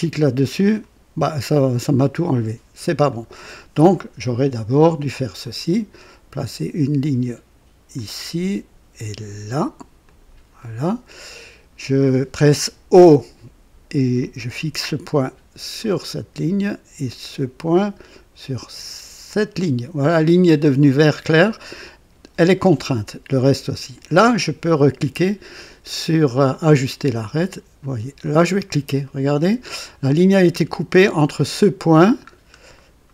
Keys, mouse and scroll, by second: 0.5 click, 3.0 click, 5.3 click, 7.9 click, 10.0 click, 10.5 right click, 13.0 o, 14.1 click, 15.7 click, 17.7 click, 19.2 click, 21.4 scroll up 1, 21.7 right click, 26.5 click, 28.1 click, 29.0 right click, 32.3 scroll down 2, 32.7 right click.